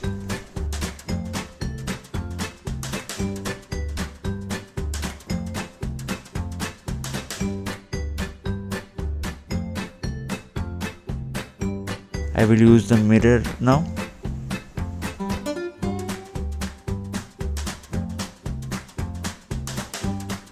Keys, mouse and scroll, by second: 0.8 Return, 1.8 scroll up 2, 3.0-3.3 scroll down 2, 4.9 scroll down 1, 5.1 click, 5.9 scroll down 2, 6.3 scroll up 2, 7.6 click, 8.9 scroll down 2, 9.7 click, 10.0 scroll up 2, 10.6 scroll down 2, 11.0 click, 11.6-12.0 scroll down 2, 12.4-12.7 scroll up 2, 12.8 scroll down 2, 13.5 click, 14.9 scroll up 2, 19.2 click.